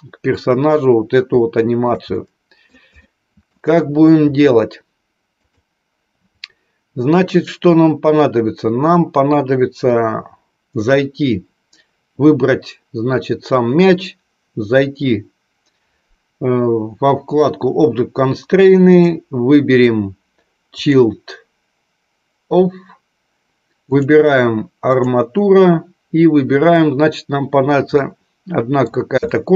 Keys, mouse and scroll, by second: 1.3 shift+middle click, 2.0 middle click, 2.9 shift+middle click, 5.5 click, 18.9-20.9 drag, 23.9-25.2 drag, 27.8 middle click, 29.3 shift+middle click.